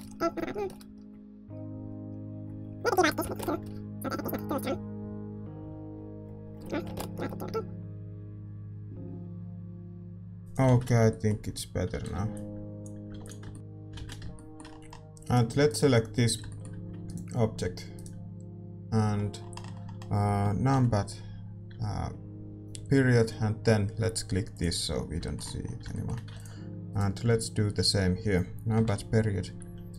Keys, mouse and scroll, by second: 10.4-12.8 drag, 11.0-13.5 middle drag, 11.0 shift+z, 12.8 ctrl+b, 13.5 shift+z, 14.3-24.5 middle drag, 15.3-24.5 right drag, 24.5-26.9 drag, 24.9-29.9 middle drag, 26.9 ctrl+s, 26.9-29.9 right drag.